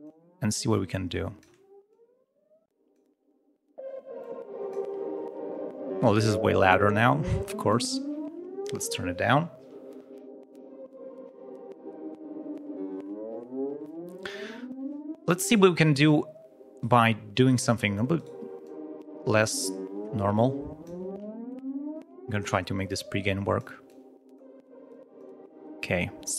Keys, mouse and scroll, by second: 0.6 click, 1.8-3.1 drag, 4.1 click, 6.9 click, 16.7 right click, 17.4 right click, 18.1 right click, 18.6 scroll up 1, 18.6-19.7 drag, 20.3 click, 23.2 click, 23.8 click, 24.8 click.